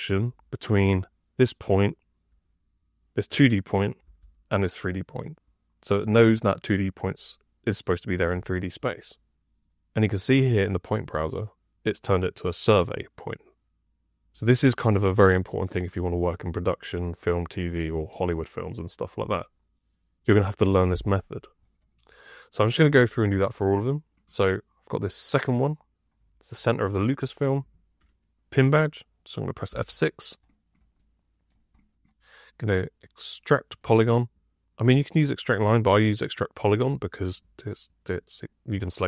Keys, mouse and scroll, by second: 0.0 F2, 3.9 F6, 22.8 F2, 29.6 F6.